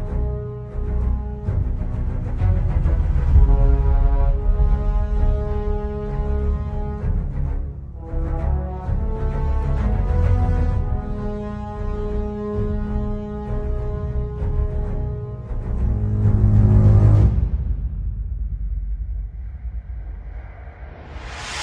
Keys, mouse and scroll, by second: 0.5 shift+middle click, 5.6 shift+a, 7.4 click, 8.6 scroll down 2, 8.9 scroll up 2, 9.0 middle click, 14.0 scroll down 1, 14.5 middle click, 14.8 scroll up 3, 14.9 middle click, 17.4 scroll down 1, 17.6 middle click, 18.0 ctrl+s, 18.6 middle click, 19.5 scroll up 3, 19.6 Tab, 19.8 1, 20.2 click, 20.5 g, 21.1 Tab, 21.2 scroll down 3, 21.3 middle click.